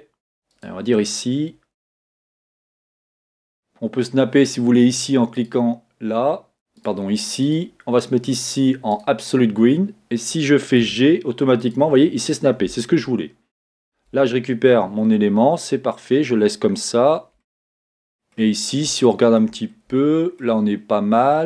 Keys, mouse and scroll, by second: 0.9-1.5 scroll up 1, 6.8-13.8 drag, 11.0 g, 15.4-16.7 scroll down 1, 17.4-21.4 shift+middle drag, 18.5 scroll down 2, 20.6-21.4 scroll up 2.